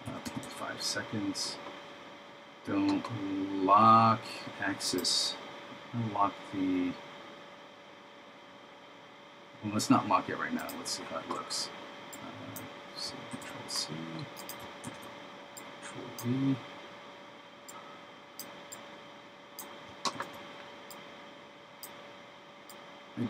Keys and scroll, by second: 13.4 super+c, 15.0 super+v, 20.2 super+v.